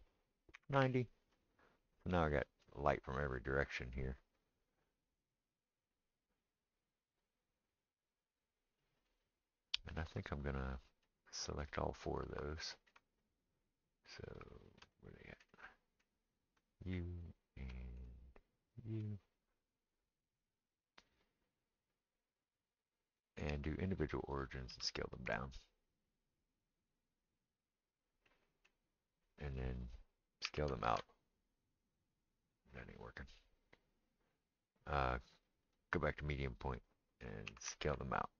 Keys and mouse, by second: 16.6 shift+click, 23.2-26.7 drag, 24.9 s, 26.7-35.7 middle drag, 30.5 s, 35.7-38.3 drag, 37.5 s.